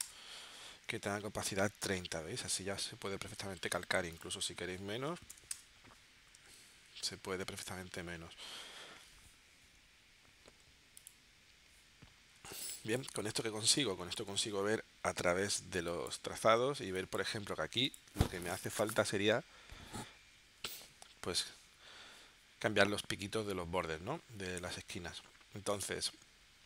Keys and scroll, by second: 0.0 Return, 5.1 2, 5.5 Return, 12.5 space, 13.8 space, 15.8 space, 16.8 space.